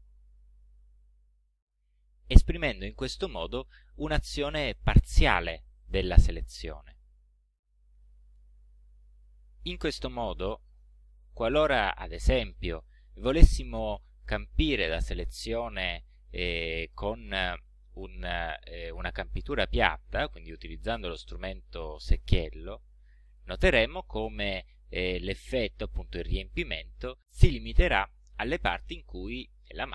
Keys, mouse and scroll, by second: 11.6 click, 13.0 click, 13.9 click, 14.8 click, 21.2 click, 23.3 click.